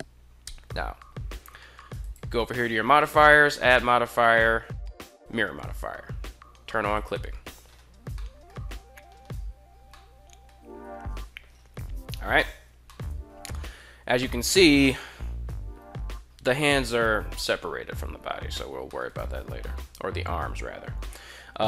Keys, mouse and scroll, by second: 1.7 click, 2.9-4.9 drag, 6.7 click, 8.0 middle click, 9.6-10.2 middle drag, 10.4 KP_1, 12.7 shift+middle drag, 13.9-14.3 shift+middle drag, 18.7 shift+middle drag, 19.4 shift+middle click, 20.7 shift+middle click.